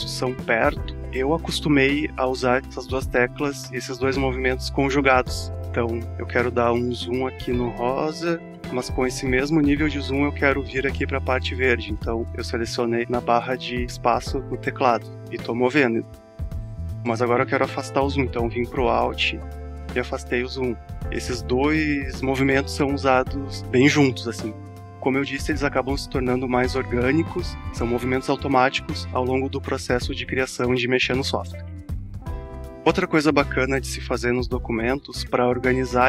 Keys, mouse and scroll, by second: 5.2 alt+scroll up 1, 7.7 space, 8.0 click, 8.1 space, 8.7 click, 8.8 space, 15.8 click, 15.9 space, 17.4 click, 17.5 space, 17.9 space, 19.8-20.2 alt+scroll down 1, 22.4 alt+scroll up 1, 35.9-36.0 alt+scroll down 1.